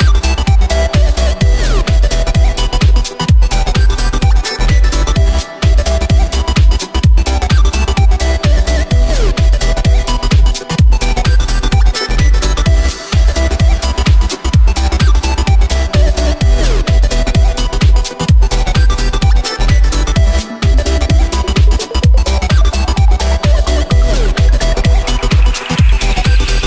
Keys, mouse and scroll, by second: 0.2 shift+right click, 0.9 s, 2.9 shift+right click, 3.3 s, 5.9 g, 8.4-8.9 scroll down 2, 8.9 s, 13.3 g, 14.9 KP_0, 15.4 right click, 16.4-17.0 scroll down 2, 17.0-20.0 middle drag, 20.9-21.9 scroll up 6, 21.9-24.1 middle drag, 24.1-24.4 scroll down 2, 24.4-25.3 middle drag, 25.3 KP_0.